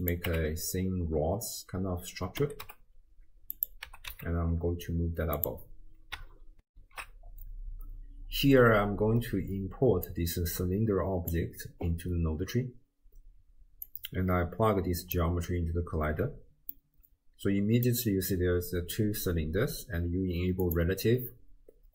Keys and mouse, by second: 0.3 Tab, 2.4 r, 3.9 g, 10.1 click, 13.9 drag, 16.7-17.9 middle drag, 20.7 click.